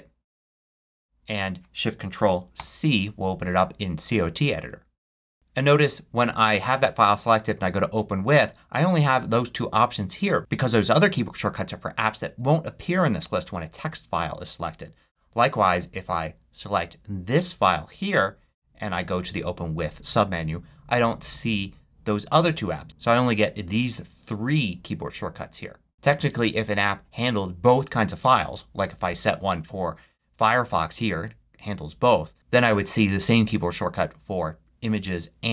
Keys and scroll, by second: 0.3 super+q, 2.5 ctrl+shift+c, 5.2 super+q.